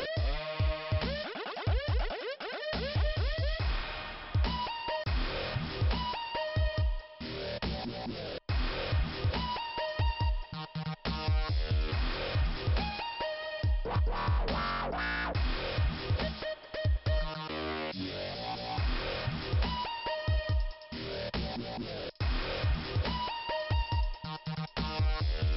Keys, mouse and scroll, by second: 1.0 scroll up 2, 2.9 click, 5.0 click, 6.4 click, 6.8 right click, 8.2 click, 10.1 click, 12.3 click, 12.6 click, 12.8 double click, 13.1 double click, 13.3 double click, 16.6 click, 18.1 click, 18.8 scroll down 2, 20.9 middle click, 25.1 shift+Return, 25.4 shift+Return.